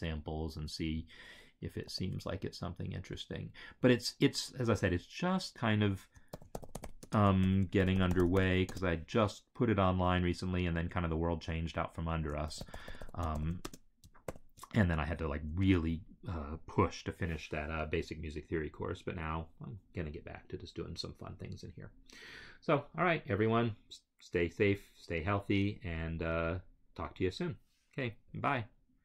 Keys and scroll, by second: 1.8 ctrl+c, 6.0-8.9 typing, 11.8-13.8 typing, 14.2 ctrl+v, 15.5 Return, 17.4 m, 18.1 space, 18.6 m, 19.8 space, 24.7-25.6 typing, 26.8-27.5 typing.